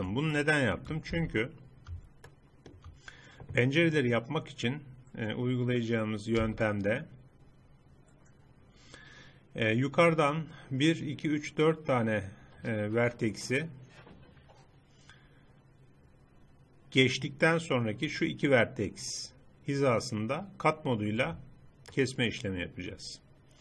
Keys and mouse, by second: 0.4 middle click, 1.1 z, 6.5 z, 22.0 middle click.